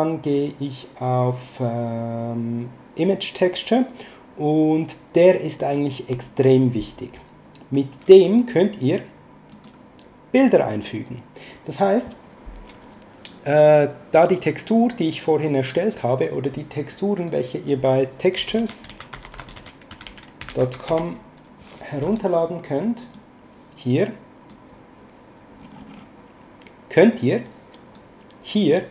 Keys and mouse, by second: 8.0 click, 9.5 click, 17.2 click, 18.3-21.1 typing, 23.1 click, 27.4 click.